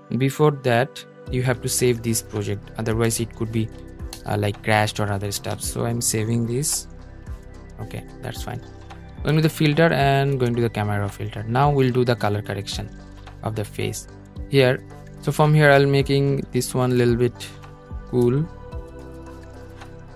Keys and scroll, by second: 0.4 Escape, 3.2 super+s.